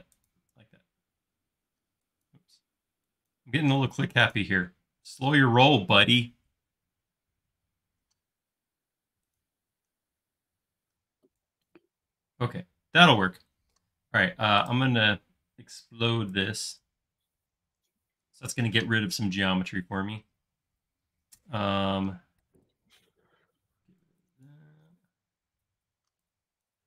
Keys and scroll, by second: 0.7 space, 1.7 e, 3.7 l, 9.9 space, 10.9 e, 12.3 space, 17.9 e, 23.4-24.0 typing.